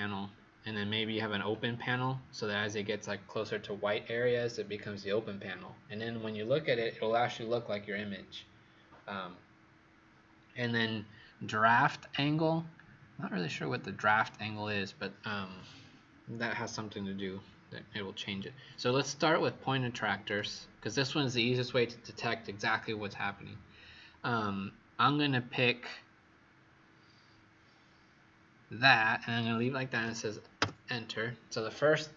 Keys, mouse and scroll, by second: 30.5 Return.